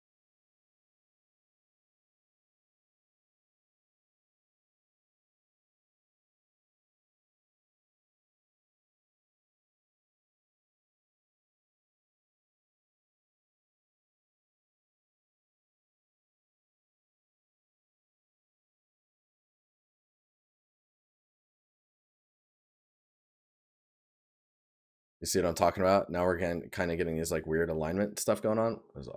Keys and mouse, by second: 22.5 right click.